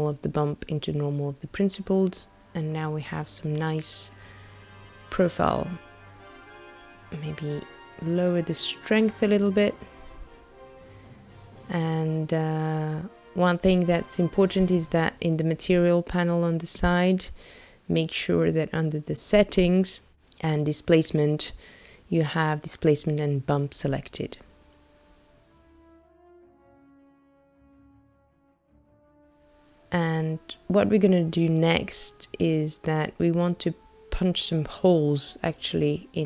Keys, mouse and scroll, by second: 0.8 click, 4.2 click, 11.1 click, 13.0 shift+right click, 15.2 middle click, 17.9-20.5 scroll down 10, 20.5 click, 21.2 click, 23.2 click, 25.0 click, 26.0 click, 30.3 click.